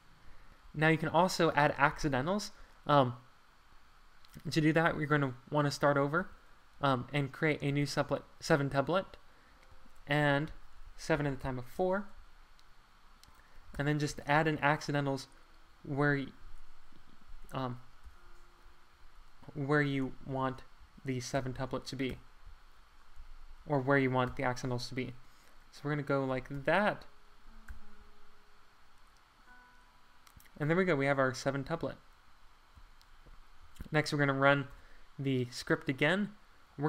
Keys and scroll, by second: 6.2 r, 7.7 r, 10.2 alt+9, 11.1 7, 11.3 Tab, 11.4 4, 11.7 Return, 13.7 =, 17.5 Left, 18.0 =, 20.1 Left, 20.3 Left, 20.8 Right, 21.3 -, 21.7 Right, 22.1 =, 23.3 Left, 24.3 =, 26.5 =, 27.7 -, 33.6 Escape, 34.7 shift+super+1.